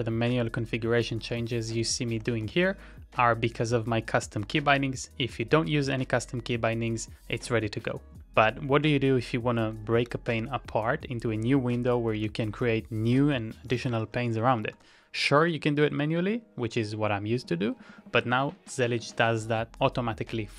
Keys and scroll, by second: 0.0-2.6 typing, 4.5 ctrl+t, 5.4 typing, 10.0 ctrl+d, 12.2 ctrl+a, 12.4 typing, 13.8-15.8 typing.